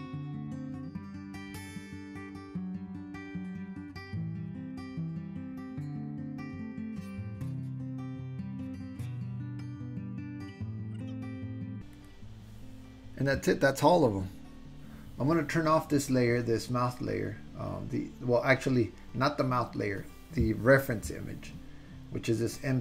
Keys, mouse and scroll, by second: 0.0 click, 0.3 click, 1.0 click, 1.6 super+z, 1.8 click, 2.3 click, 3.0 click, 3.3 click, 3.8 click, 4.2 super+z, 4.3 click, 5.3 shift+middle click, 5.7 click, 6.3 click, 6.3 click, 6.8 click, 7.1 click, 7.7 click, 8.1 click, 8.4 click, 8.6 click, 9.4 click, 9.9 click, 10.3 click, 12.1 ctrl+middle click, 12.3 ctrl+click, 13.1 ctrl+middle click.